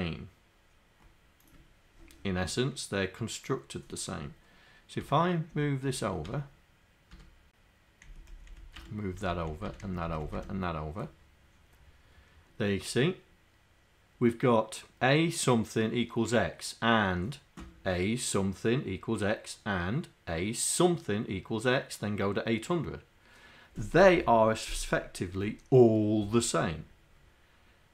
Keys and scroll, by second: 5.0 Tab, 5.6 Tab, 6.2 Tab, 8.1 Down, 8.5 Left, 8.9 Tab, 9.3 Left, 9.5 Left, 9.8 Down, 10.3 Left, 10.4 Tab.